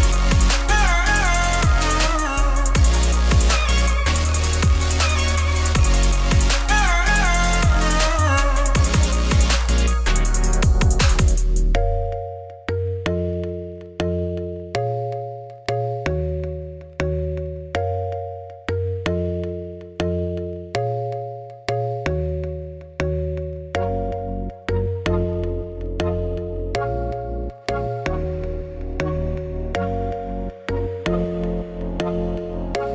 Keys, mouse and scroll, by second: 0.4 g, 1.6 Tab, 1.7 click, 1.9 click, 2.3 g, 3.6 middle click, 4.3 scroll down 1, 4.6 middle click, 4.7 z, 5.0 click, 5.2-6.4 middle drag, 6.4 scroll down 1, 6.5 scroll up 1, 6.7 shift+middle click, 6.9 ctrl+s, 8.1 KP_Divide, 9.1 middle click, 9.8 click, 11.0 shift+click, 11.3 middle click, 11.7 ctrl+p, 12.3 click, 12.5 click, 12.7 middle click, 12.8 g, 14.1-15.3 middle drag, 16.0 scroll down 1, 16.1 ctrl+s, 16.6-17.2 scroll up 2, 17.2 scroll down 1, 17.4 ctrl+s, 18.4-18.8 scroll up 5, 18.8 shift+middle click, 19.7 scroll up 1, 19.8 click, 20.1-21.6 shift+middle drag, 22.7 middle click, 22.9 Tab, 23.1-24.3 middle drag, 24.3 ctrl+r, 24.8 middle click, 25.2 click, 25.6 x, 26.0 middle click, 26.7-27.8 drag, 27.9 click, 28.4 click, 28.8 middle click, 29.3 scroll down 1, 29.5-31.7 typing, 29.9 click, 30.0 shift+click, 30.6 ctrl+z, 31.0 click, 31.5 click, 32.4 click, 32.6 shift+click.